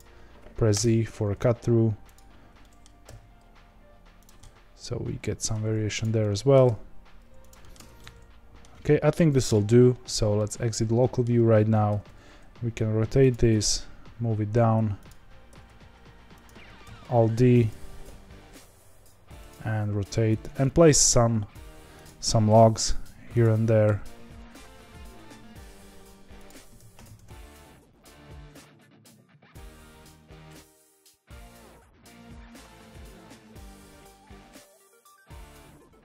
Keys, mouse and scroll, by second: 1.3 middle click, 2.1 click, 2.6 middle click, 3.0 g, 4.3-6.0 middle drag, 6.0 click, 6.2 middle click, 6.6 g, 7.6 middle click, 7.7 Tab, 7.9-8.6 middle drag, 8.6-9.4 scroll down 1, 9.4 KP_Divide, 10.3-11.8 middle drag, 11.8 r, 13.4 g, 15.5 r, 16.8 alt+d, 17.9 r, 19.6 g, 20.6 middle click, 21.3 s, 22.8 alt+d, 23.7 r, 26.7 g, 27.8 middle click, 28.3 alt+d, 29.1 g, 29.5-30.7 middle drag, 31.2 g, 32.3 click, 32.5 middle click, 32.7 alt+d, 33.1 r, 33.4 g, 34.3 alt+d, 34.8 middle click, 35.1 g, 35.8 middle click.